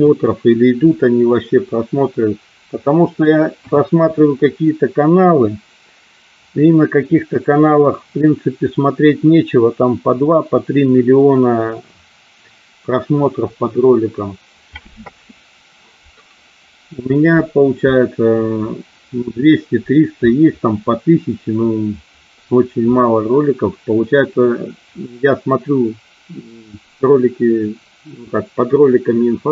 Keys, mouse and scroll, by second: 2.0-3.2 middle drag, 3.6 KP_1.